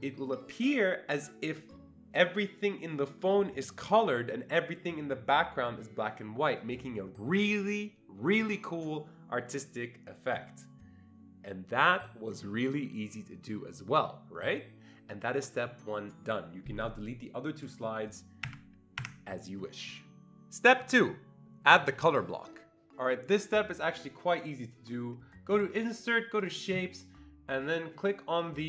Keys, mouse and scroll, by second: 17.6 click, 18.5 Delete, 19.0 Delete, 25.5 click, 25.5-26.4 ctrl+scroll up 1, 26.4 click.